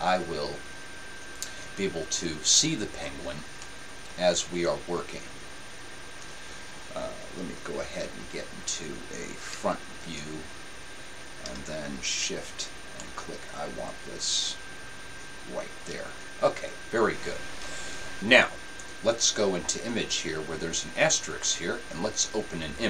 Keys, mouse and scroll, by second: 0.6-3.8 drag, 3.8-8.2 middle drag, 8.2 KP_7, 9.7 KP_1, 13.5-15.0 middle drag.